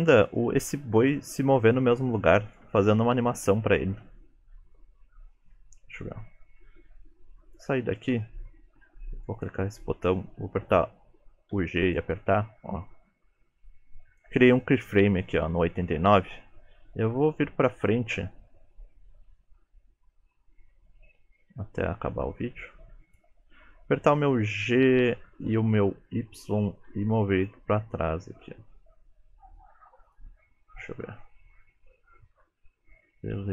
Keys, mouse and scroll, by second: 0.4 shift+middle click, 1.7-2.3 scroll up 4, 2.3 shift+middle click, 4.7 click, 9.4 click, 11.5 g, 13.7 click, 24.6 g, 31.0 click.